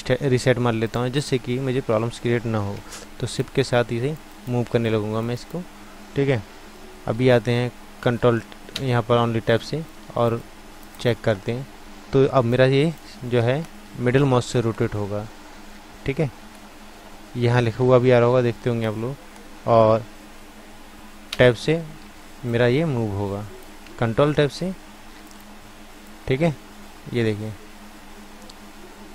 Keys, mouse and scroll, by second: 1.2-3.8 drag, 3.6 right click, 4.0-7.3 drag, 4.0-6.7 right drag, 8.0 ctrl+Tab, 8.7 Tab, 11.6 middle click, 13.2-14.3 middle drag, 15.6-16.7 middle drag, 17.1 middle click, 17.8 middle click, 21.3 Tab, 22.5-23.8 drag, 23.8 ctrl+Tab, 26.0-27.9 drag.